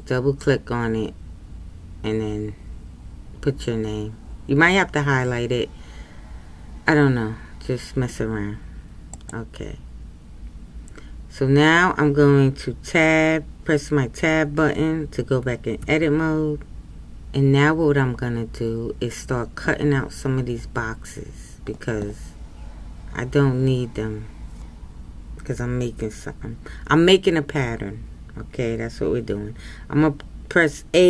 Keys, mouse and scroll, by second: 15.8 Tab.